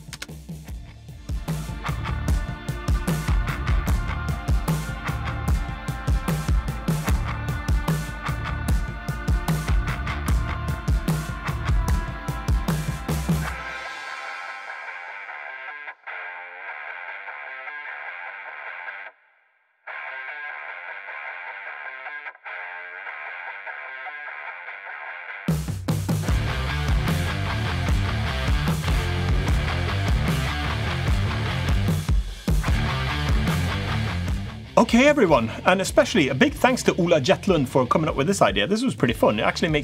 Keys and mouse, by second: 1.1-2.1 middle drag, 2.5 click, 2.8 middle click, 4.5 middle click, 7.3 Tab, 7.9 click, 9.6 shift+d, 13.3 shift+r, 13.5 shift+r, 13.6 shift+r, 13.8 shift+r, 15.3 click, 16.3-17.7 middle drag, 19.0 middle click, 20.1 ctrl+z, 20.4 ctrl+z, 20.5 ctrl+z, 20.8 ctrl+z, 21.2 ctrl+z, 21.5 click, 21.7 middle click, 23.6 Tab, 23.9 click, 24.2 Tab, 24.5 click, 24.7 a, 24.8 a, 32.3 ctrl+s.